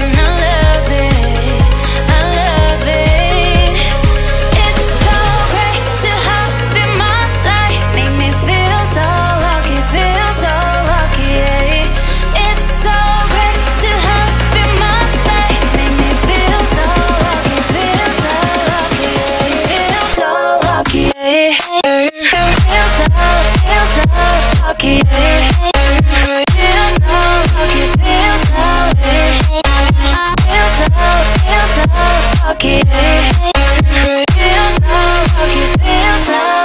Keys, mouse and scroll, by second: 0.4 click, 1.6-2.1 typing, 2.5 Return, 3.2-3.5 scroll down 1, 3.6 shift+middle click, 4.6 scroll up 1, 5.4 click, 6.4 f, 7.2 click, 8.3 space, 8.5 scroll up 1, 9.1 e, 9.3 click, 9.7-10.3 scroll down 1, 10.9 shift+middle click, 11.2-11.5 scroll up 1, 12.2 click, 14.2-15.0 scroll down 2, 15.0-15.3 scroll down 1, 15.7 click, 16.1 space, 16.4-17.5 scroll down 2, 17.5 scroll down 1, 17.7 ctrl+z, 18.2 scroll up 2, 18.4 ctrl+z, 19.0-19.5 scroll up 1, 19.5 click, 20.8 f, 21.4 click, 21.4 click, 22.5 space, 23.0 click, 24.7 f, 25.2 click, 26.1-26.7 typing, 27.0 Return, 27.5-27.9 scroll up 1, 27.9 e, 28.3 click, 30.9-31.6 scroll down 1, 32.3 click, 33.2 space, 33.3 scroll down 1, 35.6 click.